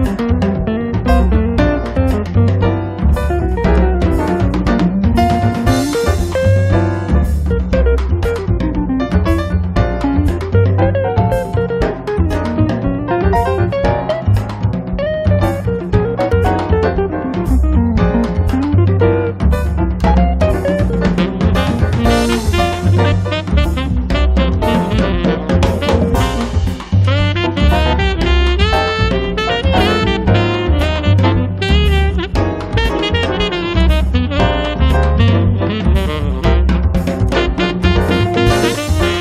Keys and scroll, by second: 1.7 space, 4.7 ctrl+z, 5.2 Escape, 8.5 m, 9.7 Up, 16.5 space, 24.8 1, 25.1 0, 27.1 1, 34.6-39.0 typing.